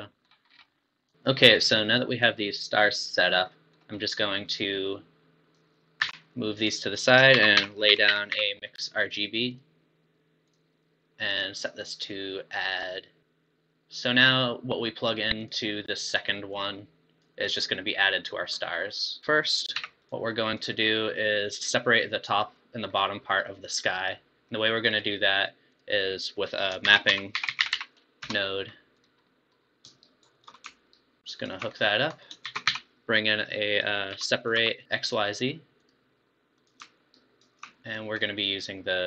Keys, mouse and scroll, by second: 0.5 scroll down 5, 1.1 click, 3.3 scroll down 7, 3.5-4.6 middle drag, 4.6 click, 6.1 g, 6.9 click, 7.5 shift+a, 11.1 middle click, 11.3-13.2 drag, 15.4 click, 19.2 click, 19.9 g, 20.6 click, 22.6-24.9 middle drag, 24.9 click, 25.7 click, 26.2 scroll up 4, 26.4 click, 27.0 shift+a, 27.8 p, 29.3-30.1 middle drag, 30.2 shift+right click, 31.0-31.8 alt+right drag, 31.8 middle click, 32.1 click, 32.4 shift+a, 37.2-37.7 alt+right drag, 37.7-38.2 middle drag, 38.2-38.6 scroll up 3.